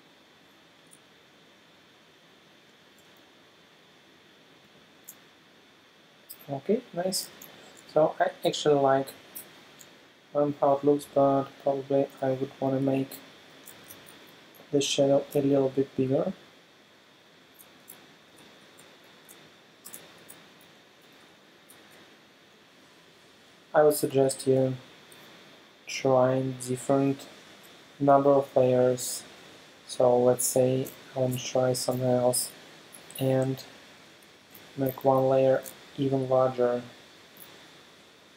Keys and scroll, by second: 1.8 space, 4.7 super+space, 7.8 alt+super+space, 13.7 super+t, 18.2 alt+shift+Left, 18.6 shift+Down, 19.9 shift+Return, 20.4 Return, 21.6 Left, 21.9 Down, 24.1 space, 30.9 super+j, 32.4 alt+super+space, 34.4 super+t.